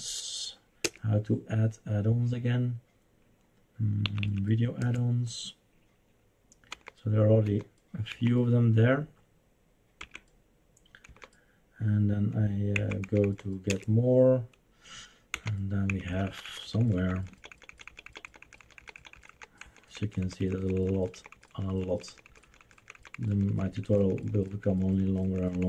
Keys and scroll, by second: 0.8 Return, 4.0 Up, 4.2 Up, 4.8 Return, 6.7 Down, 7.5 Down, 8.1 Down, 10.0 Left, 11.0 Down, 12.7 Down, 13.0 Down, 13.2 Down, 13.7 Return, 15.3 Down, 15.9 Down, 16.1 Down, 16.3 Down, 16.5 Down, 16.7 Down, 16.9 Down, 17.0 Down, 17.3 Down, 17.3 Down, 17.7 Down, 17.9 Down, 18.0 Down, 18.3 Down, 18.5 Down, 18.7 Down, 18.8 Down, 18.9 Down, 19.1 Down, 19.5 Down, 19.7 Down, 19.9 Down, 20.1 Down, 20.3 Down, 20.5 Down, 20.7 Down, 20.9 Down, 20.9 Down, 21.3 Down, 21.3 Down, 21.7 Down, 21.8 Down, 22.0 Down, 22.1 Down, 22.2 Down, 22.5 Down, 22.7 Down, 22.8 Down, 22.9 Down, 23.3 Down, 23.3 Down, 23.5 Down, 23.7 Down, 23.9 Down, 24.0 Down, 24.3 Down, 24.5 Down, 24.7 Down, 24.9 Down, 25.1 Down, 25.3 Down, 25.5 Down.